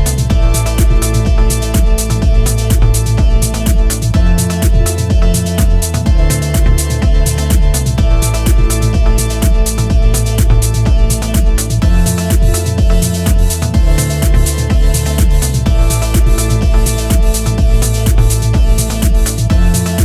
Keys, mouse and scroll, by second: 0.2 click, 1.3 click, 3.0 click, 3.9 click, 5.7 scroll down 4, 5.9 middle click, 7.8 ctrl+s, 7.9 middle click, 8.5 scroll up 3, 8.9 click, 10.3 click, 11.7 click, 16.6-17.0 scroll down 4, 17.0 middle click, 18.8 middle click, 19.4 click.